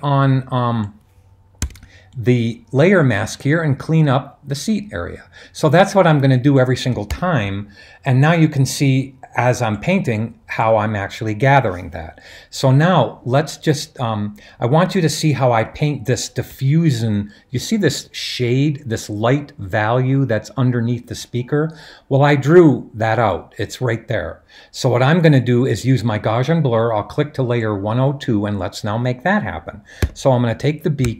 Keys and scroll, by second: 1.6 x, 7.1 super+d, 30.0 b.